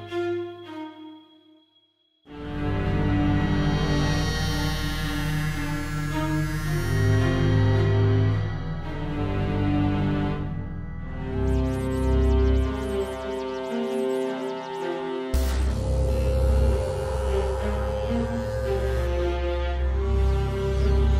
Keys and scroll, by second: 0.1 super+d, 8.0 Tab, 11.3-14.2 typing, 15.1 Left.